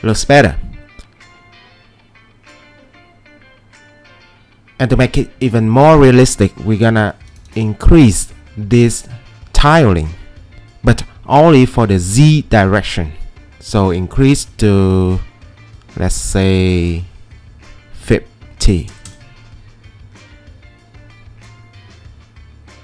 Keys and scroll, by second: 0.9 typing, 18.4-19.4 typing.